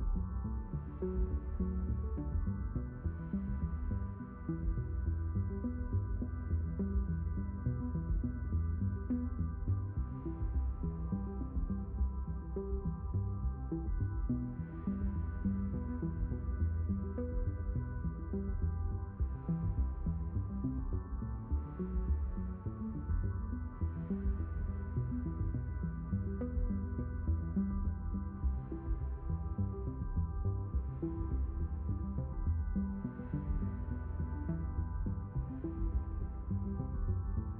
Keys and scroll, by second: 23.9 5.